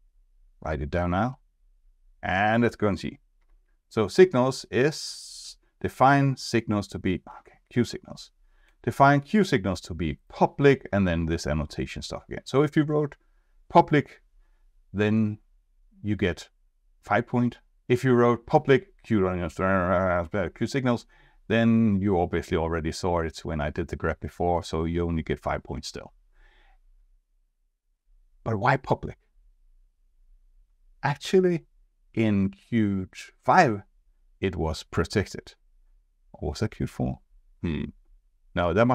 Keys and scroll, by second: 3.4 F2, 7.7 F2.